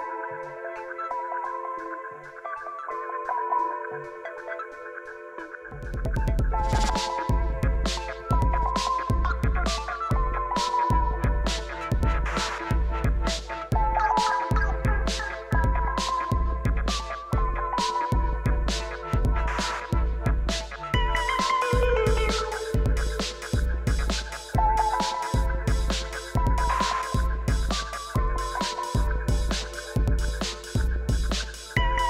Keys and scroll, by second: 0.0-1.0 typing, 5.1 g, 7.6 g, 9.2 shift+s, 9.7 Tab, 13.6 Tab, 14.1 a, 14.4 s, 14.6 y, 15.1 Escape, 16.0 s, 16.2 y, 19.7 7, 20.1 alt+a, 20.7 l, 21.1 shift+d, 21.6 r, 21.9 Escape, 22.8 r, 23.1 Escape, 23.3 o, 23.6 g, 24.5 r, 26.8 g, 27.1 r, 27.4 g, 28.1 s, 30.2 Tab, 31.5 shift+a.